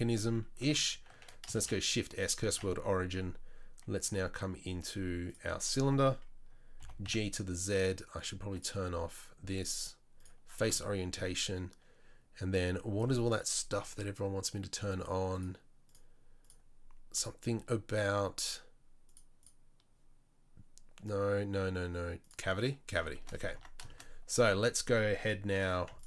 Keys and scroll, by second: 1.6 shift+s, 2.5 shift+a, 6.8 g, 23.6 Tab, 24.3 a.